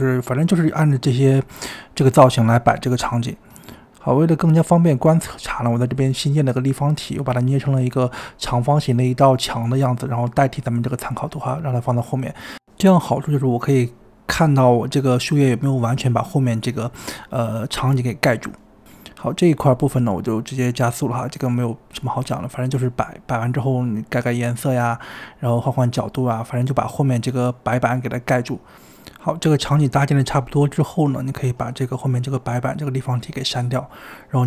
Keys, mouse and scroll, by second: 0.2 shift+middle click, 0.5 click, 1.4-2.4 shift+middle drag, 2.4 click, 2.6 g, 2.9 KP_1, 3.1 scroll up 3, 3.3-4.4 shift+middle drag, 4.4-11.6 typing, 4.6 click, 4.9 scroll down 2, 5.0 middle click, 5.2 click, 5.5 click, 5.5 shift+middle click, 5.6 scroll up 2, 6.0 click, 6.1 click, 6.2 shift+middle click, 6.3 shift+middle click, 7.2 scroll up 1, 12.7 middle click, 13.6 click, 13.9 scroll down 2, 14.3 click, 14.4 middle click, 14.8 KP_1, 15.0-15.4 scroll up 5, 15.9 click, 16.0 scroll up 1, 16.3-16.7 shift+middle drag, 16.7 click, 16.7-34.4 typing, 17.8 scroll down 2, 17.9 shift+middle click, 18.2 click, 18.7 scroll down 3, 19.0 shift+middle click, 19.0 click, 19.0 middle click, 19.3 scroll up 1, 19.4 middle click, 19.5 click, 20.4 click, 20.6 middle click, 20.7 scroll up 1, 20.7 shift+middle click, 21.1 middle click, 21.1 click, 21.2 shift+middle click, 21.2 scroll up 16, 21.3 click, 21.5 shift+middle click, 21.7 shift+click, 21.8 ctrl+l, 22.1 scroll down 3, 22.1 middle click, 22.2 ctrl+l, 22.3 middle click, 22.3 shift+middle click, 22.4 scroll up 4, 22.5 click, 23.3 click, 24.0 shift+middle click, 24.3 click, 24.4 middle click, 24.5 shift+middle click, 24.8 click, 24.9 click, 25.7 ctrl+l, 25.8 middle click, 25.8 scroll down 12, 25.8 middle click, 25.9 shift+middle click, 26.0 click, 26.6 click, 27.3 shift+middle click, 27.5 click, 27.9 shift+click, 28.0 ctrl+l, 28.1 click, 28.8 shift+middle click, 28.8 click, 29.0 shift+middle click, 29.2 click, 29.5 click, 29.6 middle click, 29.8 click, 30.1 shift+middle click, 30.4 middle click, 31.0 click, 31.1 click, 31.3 click, 31.6 shift+middle click, 31.8 click, 32.0 click, 32.4 click, 32.5 click, 33.0 shift+middle click, 33.8 click, 34.3 shift+middle click.